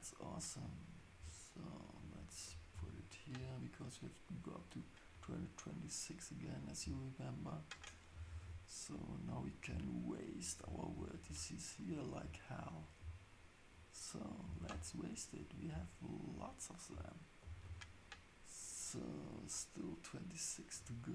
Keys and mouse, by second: 2.7 ctrl+shift+s, 8.3 ctrl+shift+s, 9.4 click, 10.2 shift+click, 10.9 ctrl+shift+s, 12.0 click, 12.7 shift+click, 14.5 ctrl+shift+s, 15.5 click, 17.4 ctrl+shift+s.